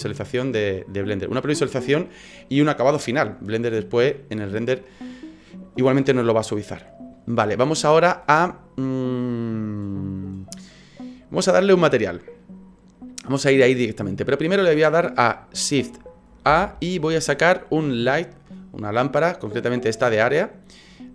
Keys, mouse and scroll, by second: 0.6-3.7 scroll down 2, 6.8 scroll up 3, 14.1 scroll down 1, 15.7-16.5 scroll down 3, 16.5 shift+a.